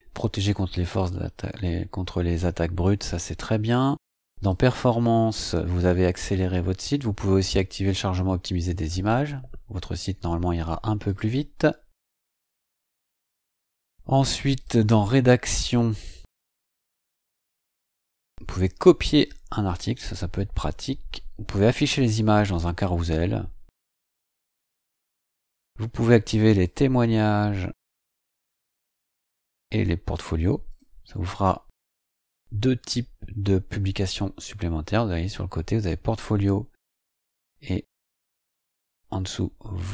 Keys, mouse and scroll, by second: 3.2-3.8 scroll up 4, 4.4 click, 5.6-6.9 scroll down 2, 6.9-8.5 scroll down 1, 8.5 click, 11.0 click, 12.5-12.9 scroll down 2, 13.2-13.9 scroll up 4, 14.5 click, 15.8-16.1 scroll down 2, 18.5 click, 22.0 click, 24.5 scroll down 1, 25.3 scroll down 2, 26.5 click, 28.1 click, 30.7 click.